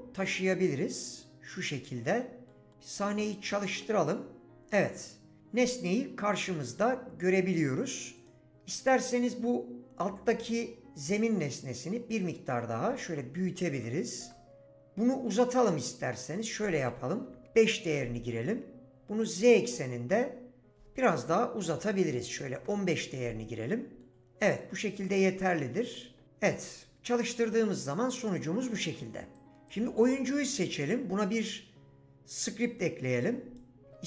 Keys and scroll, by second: 13.8 4, 14.2 Return, 17.2 5, 17.5 Return, 21.4-22.6 typing.